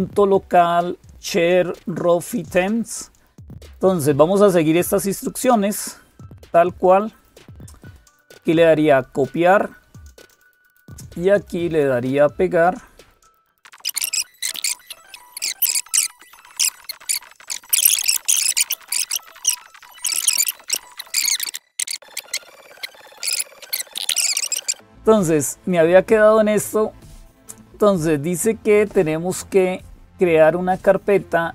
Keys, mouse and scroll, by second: 0.0-31.5 typing, 13.6 click, 14.2 click, 14.7 super+Return, 15.0 super+t, 15.9 click, 16.2 super+m, 16.3 click, 16.7 super+q, 16.9 click, 18.5 click, 19.0 Down, 19.0 Return, 19.0 click, 20.2 click, 20.5 super+Return, 20.6 super+m, 23.7 ctrl+super+j, 24.0 click.